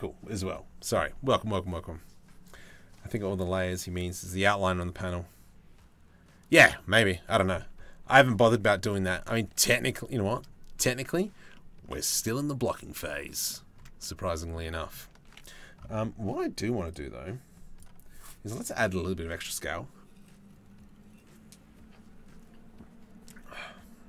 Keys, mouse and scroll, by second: 8.4 click, 9.1 z, 9.8 click, 11.1 click, 12.6 click, 13.6 click, 15.3 ctrl+s.